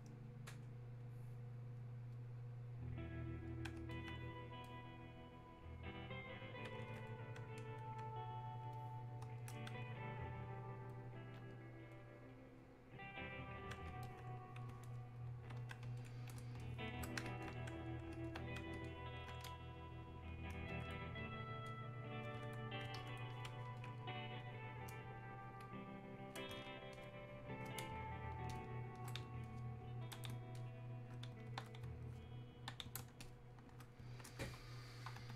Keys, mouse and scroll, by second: 17.5-18.9 alt+drag, 21.7-27.0 drag, 35.2 Escape.